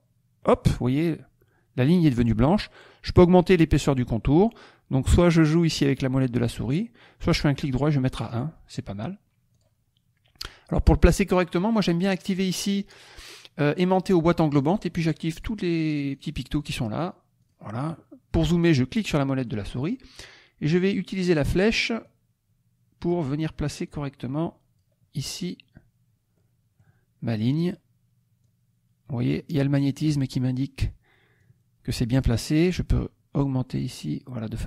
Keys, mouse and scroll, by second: 0.5 click, 5.4-6.6 scroll up 1, 6.6-7.2 scroll down 1, 7.2 right click, 8.3 click, 9.5 click, 14.5 click, 15.3 click, 15.7 click, 16.1 click, 17.3 click, 18.9 middle click, 19.5 middle click, 22.0-23.2 drag, 23.9 click, 26.3 middle click, 27.7 middle click, 28.4-29.9 drag, 31.3 click, 32.9-34.6 drag.